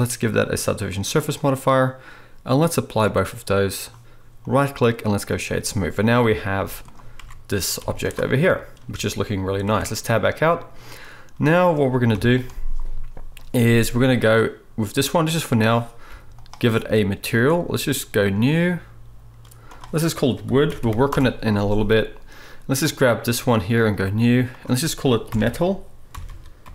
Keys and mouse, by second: 4.4-8.8 middle drag, 4.4-8.8 right drag, 6.6 z, 7.2 Tab, 7.8 z, 8.9 a, 9.7 Tab, 12.1 KP_7, 13.4-17.4 drag, 16.1 g, 17.4 middle click, 18.2-22.9 drag, 20.8 o, 22.9-23.9 middle drag, 23.9-26.7 drag.